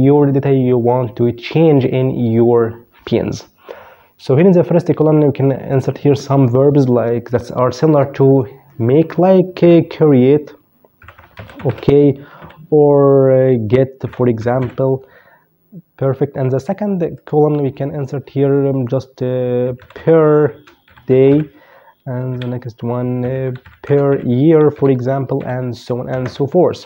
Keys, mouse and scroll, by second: 4.9 click, 8.7 c, 9.9-11.3 typing, 11.5 Down, 12.9-14.2 typing, 16.3 click, 18.5-20.9 typing, 21.5 Down, 22.1-25.4 typing, 26.5 click.